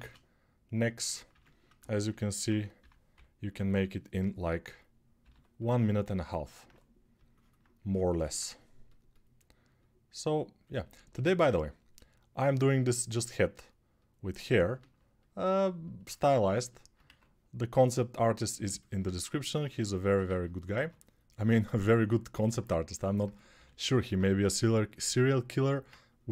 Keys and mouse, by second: 1.1 ctrl+r, 2.6 6, 2.9-26.3 drag, 2.9 [, 3.4 [, 3.5 [, 5.0 g, 16.8 1, 20.9 2, 23.3 g.